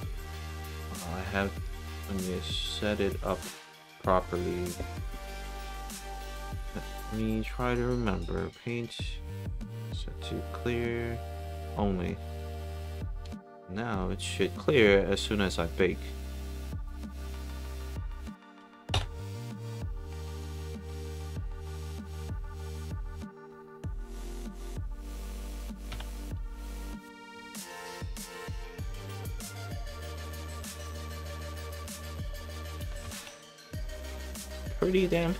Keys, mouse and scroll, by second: 7.2 click, 9.6 click, 11.2 click, 13.4 alt+middle click, 13.9 alt+middle click, 14.7-15.8 alt+drag, 16.1 click, 17.4 click, 20.5 alt+b, 20.6 alt+right click, 21.0 alt+middle click, 21.4 alt+click, 21.8 alt+right click, 22.5 click, 22.6 right click, 23.4 click, 24.6 click, 26.0 b, 27.7 alt+middle click, 28.3 alt+click, 29.1 alt+middle click, 29.5 alt+click, 29.9 alt+middle click, 30.3 alt+right click, 30.7 alt+middle click, 31.1 right click, 31.7-32.7 alt+drag, 32.9 alt+b, 33.7 alt+click, 34.3-35.3 alt+drag.